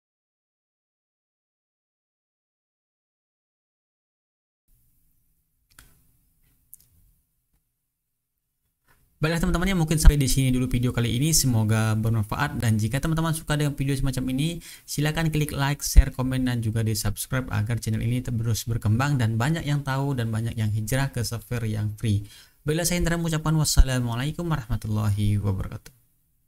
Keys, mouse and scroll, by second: 0.3 click, 0.4 ctrl+scroll down 2, 0.5 ctrl+scroll up 2, 1.2 click, 1.7 click, 2.0 click, 2.6 click, 2.9 click, 3.1 click, 3.5 click, 3.8 click, 4.2 click, 4.6 click, 4.9 click, 5.3 click, 5.4 click, 5.9 click, 6.7 ctrl+scroll down 1, 6.8 ctrl+scroll up 1, 7.3 click, 7.9 click, 8.0 click, 8.5 click, 8.8 click, 9.2 click, 9.7 click, 10.0 click, 10.6 click, 10.9 click, 11.5 click, 11.9 click, 13.4 click, 13.7 ctrl+scroll up 2, 14.1 click, 15.4 click, 15.7 click, 16.4 click, 16.7 click, 16.9 click, 17.5 click, 17.8 click, 18.0 click, 18.3 click, 18.6 click, 18.9 click, 19.2 click, 19.3 click, 19.5 click, 20.0 click, 20.1 click, 20.5 click, 20.8 click, 21.1 click, 21.3 click, 22.0 click, 22.3 click, 23.0 click, 23.4 click, 23.7 click, 23.9 click, 24.2 click, 24.3 click, 24.6 click, 25.0 click, 25.3 click, 25.5 click, 26.0 click, 26.2 click.